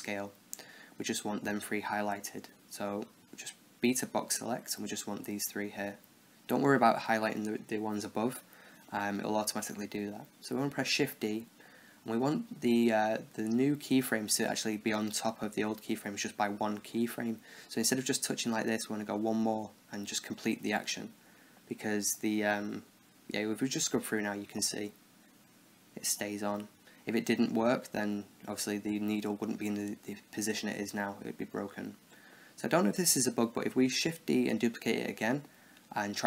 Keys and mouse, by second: 3.5 a, 3.9 b, 8.8-12.4 middle drag, 10.0 shift+d, 23.2-25.4 drag, 29.3-34.6 middle drag, 34.6 shift+d, 35.3-36.2 middle drag.